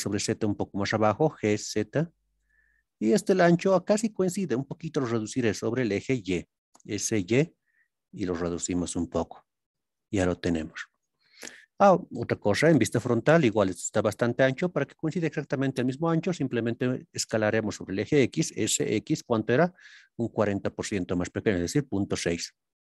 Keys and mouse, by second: 1.3 z, 2.4 click, 7.1 y, 8.8 click, 12.6 KP_1, 20.0 KP_Decimal, 20.1 KP_6.